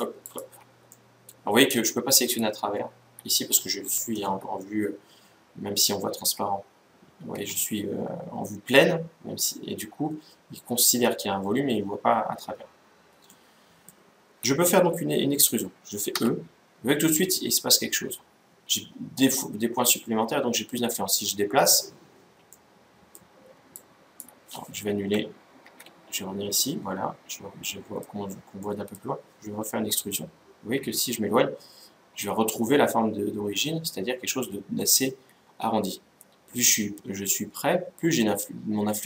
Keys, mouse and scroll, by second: 0.6-2.2 middle drag, 2.0-3.7 right drag, 2.3 middle click, 5.9 z, 7.0 z, 13.0-14.7 middle drag, 15.8 e, 24.6 Escape, 25.4 ctrl+z, 25.8-28.1 middle drag, 28.4-30.2 middle drag, 29.5 e.